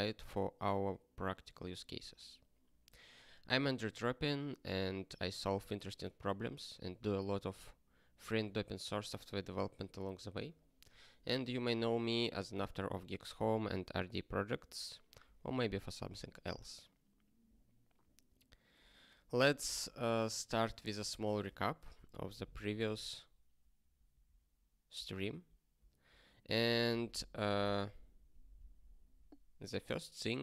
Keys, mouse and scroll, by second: 18.8 click, 23.9 ctrl+n, 26.0 ctrl+n, 26.5 click.